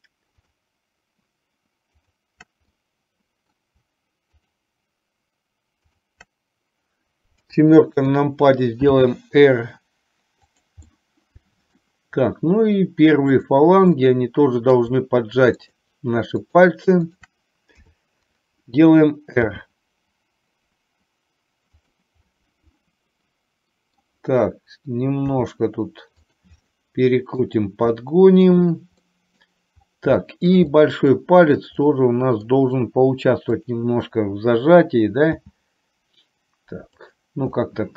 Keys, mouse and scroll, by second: 2.8 middle click, 7.5 KP_7, 9.1 r, 11.0 middle click, 14.1 middle click, 15.6 shift+click, 16.5 shift+click, 17.2 shift+click, 17.8 KP_7, 19.7 r, 22.5-24.1 middle drag, 25.5 r, 26.8 middle click, 28.1 middle click, 29.1 scroll up 1, 29.2 middle click, 29.5-30.0 scroll down 1, 30.3-31.0 shift+scroll up 2, 30.5 shift+middle click, 31.0 middle click, 32.0 middle click, 33.7 click, 35.6 r, 37.7-37.9 middle drag.